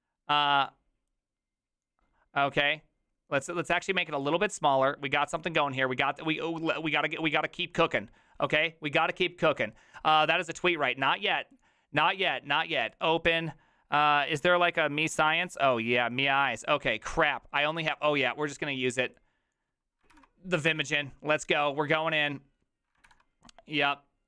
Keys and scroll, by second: 20.1 ctrl+c, 23.1 ctrl+v.